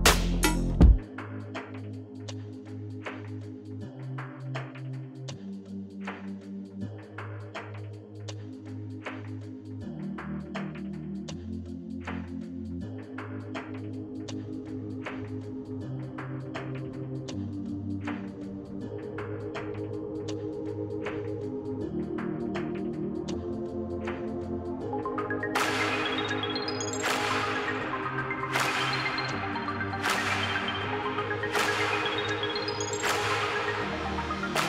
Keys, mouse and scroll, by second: 0.0-2.2 typing, 0.1 click, 4.7 click, 5.2 click, 7.5 click, 8.1-10.4 typing, 11.5 Tab, 14.4 Tab, 14.7 Tab, 15.3 Tab, 16.7 Tab, 16.8-25.7 typing, 20.9 Tab, 24.2 Return, 27.8 typing, 29.6 space, 29.9 space, 30.5 space, 32.9 click, 33.3-34.5 typing.